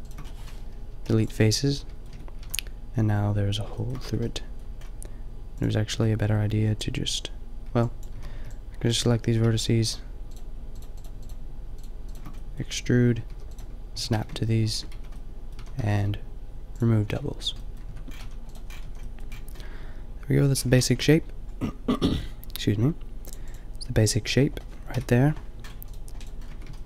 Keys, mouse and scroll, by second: 0.2 middle click, 0.6 Return, 0.9 Delete, 1.0 middle click, 2.1 Tab, 2.4 a, 4.1 Tab, 6.6 b, 8.1 b, 8.1 a, 8.3 b, 10.1 middle click, 13.2-15.8 typing, 16.1 click, 17.8 Tab, 18.1 a, 18.8 a, 19.3-20.6 middle drag, 24.9 KP_5, 26.4 Tab.